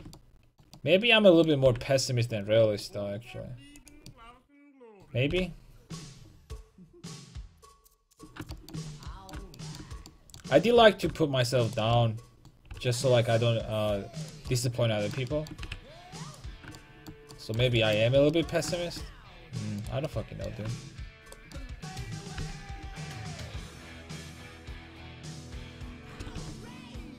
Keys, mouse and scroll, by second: 1.7 g, 5.3 g, 8.2 click, 8.7 g, 9.1-10.1 drag, 11.0-13.9 right drag, 12.8 g, 14.9-16.3 drag, 15.7 g, 19.8 right click, 20.5-21.7 middle drag, 21.7 right click, 22.4 g, 26.1-27.1 drag, 26.2 r.